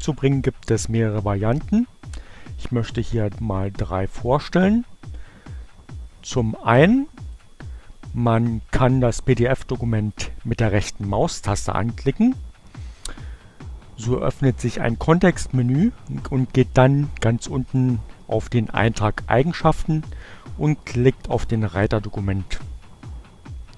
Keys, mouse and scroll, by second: 9.6 click, 11.4 right click, 16.4 click, 19.4 click.